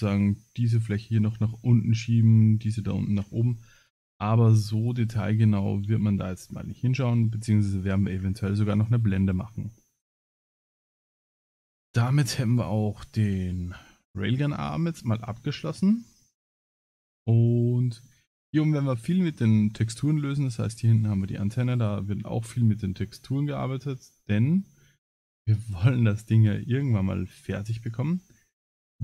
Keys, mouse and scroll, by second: 26.8-27.8 middle drag.